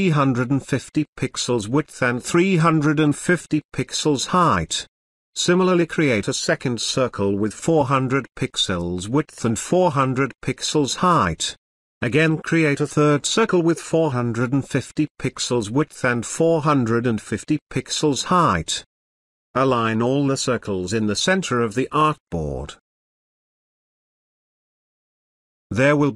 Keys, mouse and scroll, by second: 6.3 click, 9.2 Tab, 11.4 click, 15.6 Tab, 18.9-20.4 drag, 23.2 click, 25.1 space, 25.9 click.